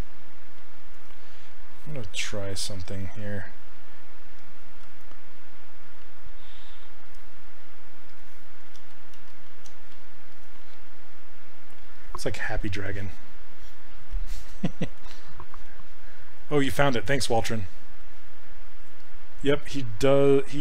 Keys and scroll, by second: 0.6 s, 3.0 s, 4.8 ctrl+z, 8.8 ctrl+z, 9.2 ctrl+z, 9.9 s.